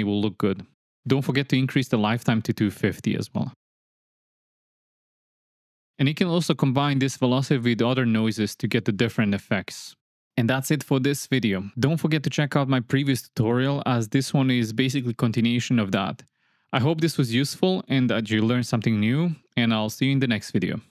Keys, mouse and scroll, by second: 0.4 space, 3.1-4.8 drag, 5.0 click, 5.1 shift+a, 6.2 click, 6.5 drag, 7.3 click, 7.9 click, 8.1 click, 8.9 click, 9.1 click, 9.4 click, 9.9 click, 10.3 click, 10.5 click, 10.7 click, 11.8 click, 12.1 click, 12.8 click, 13.5 click, 14.0 shift+d, 14.4 shift+d, 14.5 click, 14.8 drag, 15.4 click, 15.9 click, 16.4 shift+Left, 16.5 space, 19.1 space, 19.3 space.